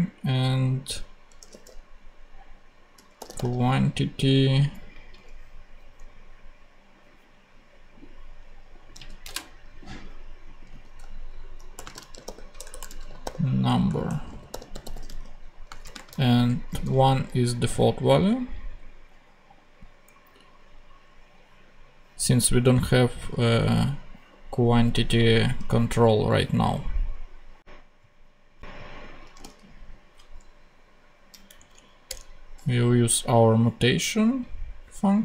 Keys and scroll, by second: 1.3 q, 2.1 u, 2.9 a, 3.3 n, 5.1 ctrl+Tab, 9.2 ctrl+super+Tab, 10.1 ctrl+Tab, 10.9 shift+super+v, 11.8-16.8 typing, 29.3 a, 30.1 d, 31.5 Down, 32.0 Return.